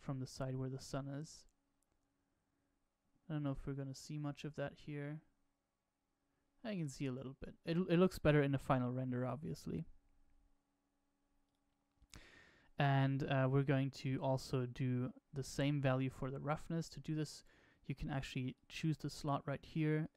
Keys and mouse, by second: 11.9 click, 18.5-20.1 drag.